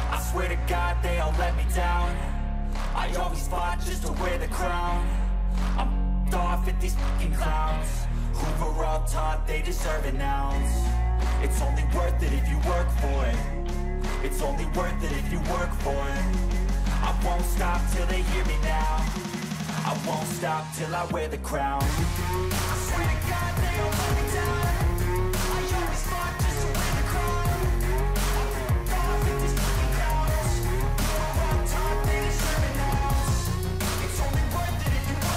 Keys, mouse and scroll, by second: 6.4 double click, 14.1 ctrl+-, 14.5 ctrl+-, 14.8 ctrl+=, 16.6 scroll up 2, 20.3 right click, 33.7 click.